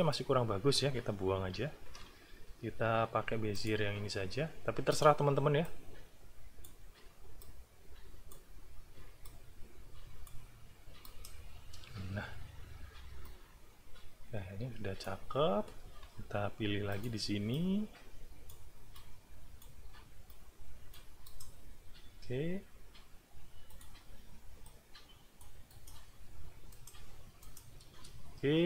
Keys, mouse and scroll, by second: 0.0 click, 1.4 Delete, 2.4 b, 3.5 click, 4.9 click, 5.6 click, 7.4 click, 9.2-10.4 drag, 11.0 click, 11.0 middle click, 11.8 space, 13.2-15.2 drag, 16.0 b, 16.9 click, 17.5 click, 18.9 click, 20.3 click, 21.2 right click, 23.7 click, 24.0-24.6 scroll up 1, 24.6 click, 25.6 scroll up 1, 25.7 right click, 26.7 right click, 27.4 right click, 27.9 space.